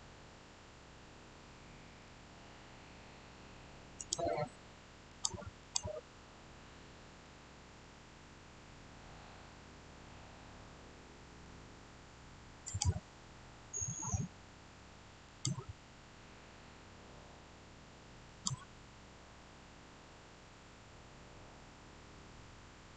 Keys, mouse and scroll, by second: 3.9 click, 7.6-12.5 shift+middle drag, 12.5 click, 15.1 click, 18.2 click, 19.7 scroll up 1, 20.9-22.6 scroll down 1.